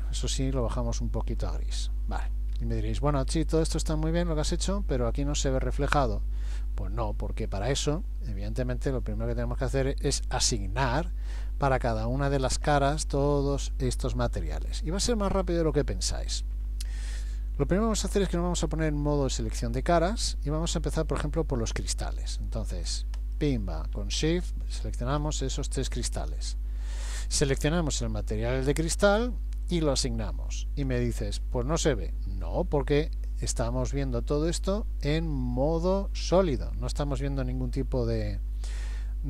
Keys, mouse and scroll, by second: 2.5-4.9 scroll up 14, 18.7 click, 23.2 click, 24.2 shift+click, 24.8 shift+click, 27.8 click, 29.7 click.